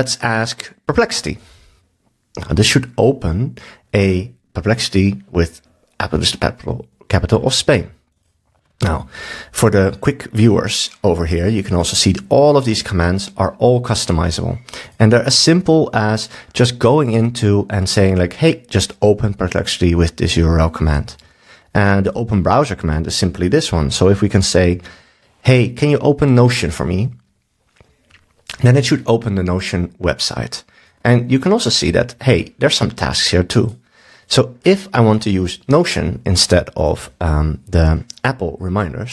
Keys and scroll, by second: 24.7 super+s.